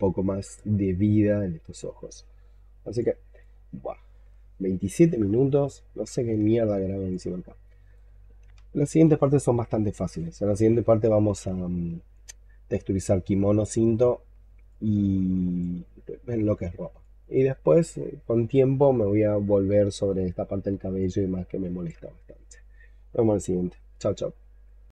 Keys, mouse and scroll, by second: 2.4 scroll down 3, 2.8 alt+click, 3.6 alt+middle click, 5.7 scroll down 1, 6.2 alt+middle click, 7.0 alt+click, 11.6 alt+middle click, 13.0 alt+middle click, 14.5 alt+click, 16.2 alt+middle click, 16.9 alt+click, 17.7 alt+click, 20.9 alt+click.